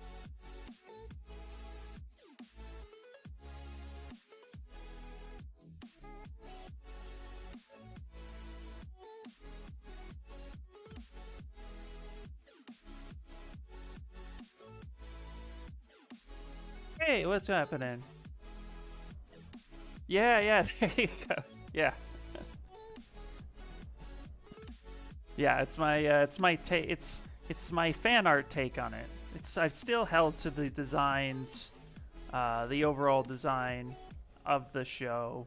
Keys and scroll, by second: 1.9 s, 5.4 ctrl+z, 5.6 ctrl+z, 6.1 s, 9.3 s, 28.3 s, 33.8 ctrl+z, 34.2 ctrl+z, 34.3 ctrl+z, 34.5 ctrl+z, 34.7 ctrl+z.